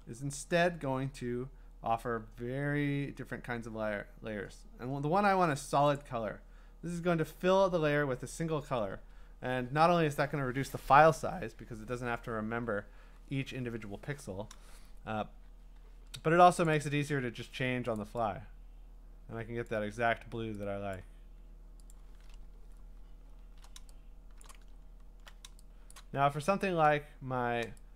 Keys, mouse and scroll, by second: 6.0 click, 8.9 Return, 16.7 click, 16.9 click, 18.0 click, 19.7 click, 21.0 click, 21.9 click, 23.0-23.5 scroll, 24.4 click, 24.8 scroll, 25.9 click, 26.4-26.8 scroll.